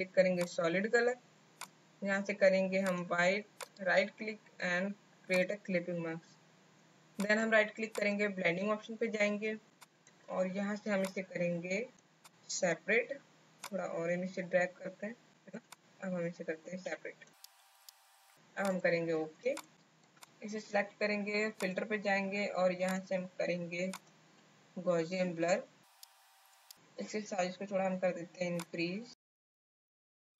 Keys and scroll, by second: 19.3 space.